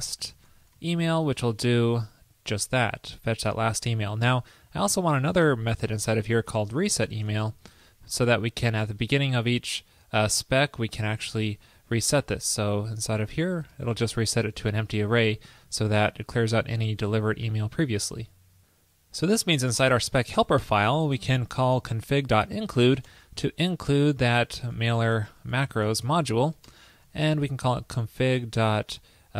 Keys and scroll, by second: 1.5 super+v, 12.3 super+v, 14.6 super+Right, 17.2 super+s, 26.7 super+Return.